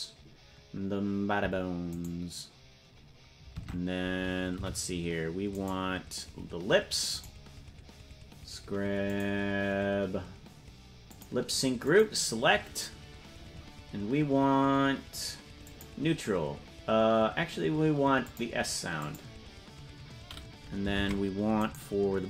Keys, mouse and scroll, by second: 2.1 right click, 3.8 ctrl+Tab, 4.8 c, 7.4 right click, 9.2 click, 11.2 click, 12.2 click, 15.8 click, 18.5 click, 19.3 click, 21.4 ctrl+Tab, 22.0 right click.